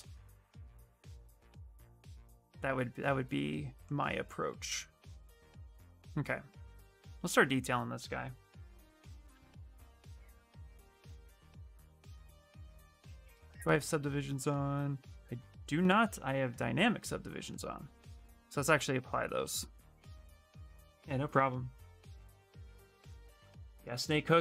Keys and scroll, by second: 5.4 shift+f, 7.8-9.0 typing, 11.2 shift+f, 18.8 space, 19.4 space.